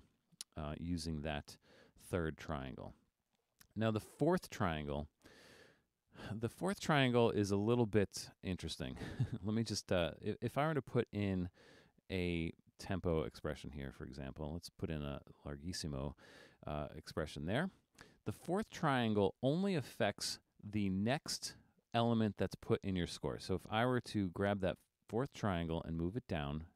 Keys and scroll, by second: 1.9 super+z.